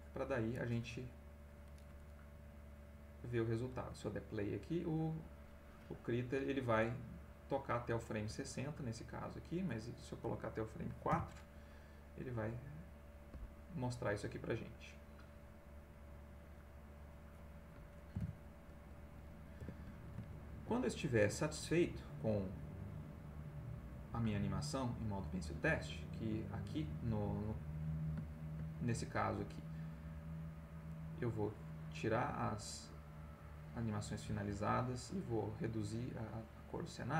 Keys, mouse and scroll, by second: 3.0 click, 8.3 Escape, 9.2 click, 11.1 4, 12.2 click, 16.4 click, 17.0 click, 17.9-18.7 typing, 19.6 Tab, 20.0 ctrl+middle click, 21.5-23.9 drag, 26.4 click, 27.8-29.1 middle drag, 30.0 click, 31.5 click, 32.4 click, 33.3 click, 36.4 click.